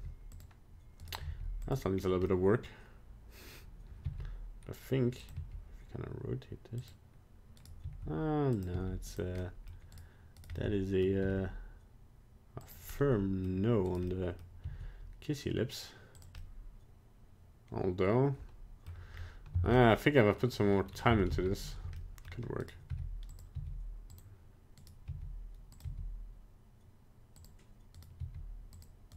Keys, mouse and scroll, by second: 0.0 g, 1.1 right click, 1.2 g, 1.9 scroll down 1, 2.3 middle click, 4.1 r, 5.5 g, 7.7 right click, 7.8 r, 8.8 g, 9.4 middle click, 9.6 middle click, 10.1 right click, 10.5 right click, 10.6 middle click, 11.3 r, 12.9 middle click, 12.9 middle click, 14.0 right click, 14.1 middle click, 14.7 r, 16.4 middle click, 19.1 scroll up 1, 19.7 a, 19.7 middle click, 19.8 middle click, 20.9 scroll down 1, 21.3 alt+r, 21.4 alt+g, 22.0 middle click, 22.7 right click, 23.0 g, 23.6 r, 24.9 right click, 25.2 r, 26.0 g, 28.1 right click, 28.3 g.